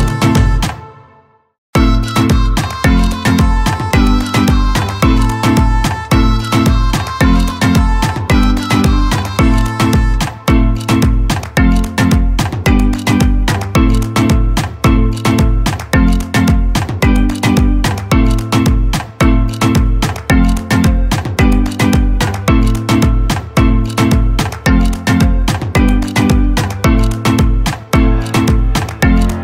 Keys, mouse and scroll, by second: 8.6-18.4 drag, 18.4-23.5 drag, 26.4 space, 26.8 click.